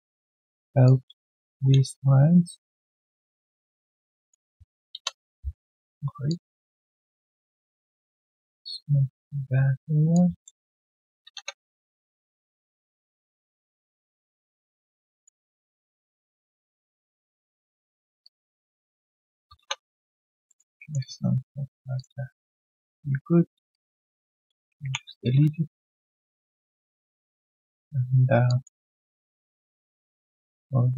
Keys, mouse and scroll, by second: 2.2 alt+middle click, 4.9 Return, 5.7 alt+click, 9.2 shift+click, 10.4 alt+middle click, 11.3 Return, 12.4 alt+click, 13.2 alt+middle click, 13.6 alt+click, 18.2 shift+click, 20.4 alt+middle click, 20.7 alt+click, 21.2 right click, 21.2 q, 22.6 shift+click, 25.7 alt+middle click, 26.1 alt+click, 26.6 alt+middle click, 26.9 alt+click, 28.4 alt+click, 28.9 right click, 29.7 w.